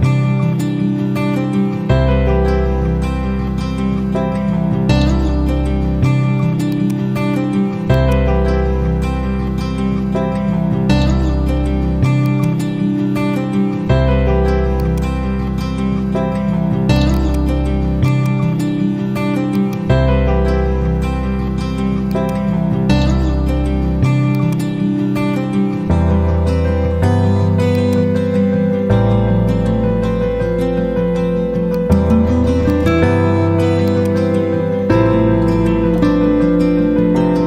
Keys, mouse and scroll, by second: 0.3 shift+i, 0.9 shift+e, 2.8 Return, 3.5-4.7 typing, 6.7-11.0 drag, 12.5-13.7 drag, 16.9-19.4 drag, 18.3-18.9 click, 19.7 ctrl+a, 22.0 click, 22.2 ctrl+a, 24.3 click, 24.5 ctrl+a, 27.7 click, 28.1 ctrl+a, 31.6 click, 34.1 ctrl+a.